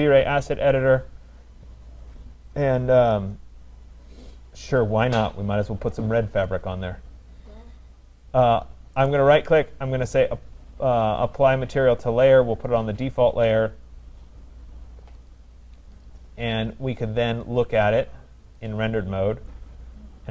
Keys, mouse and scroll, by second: 2.8 middle click, 3.4 middle click, 4.8 click, 6.5 click, 9.1 right click, 12.8 click, 16.1 click, 18.7 click, 20.2 middle click, 20.2 middle click.